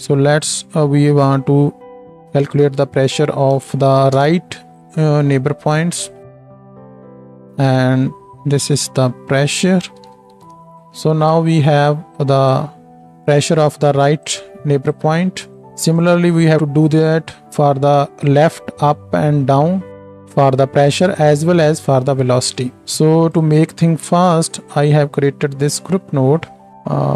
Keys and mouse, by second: 8.7-9.3 drag, 16.2-18.2 drag, 24.6 shift+a.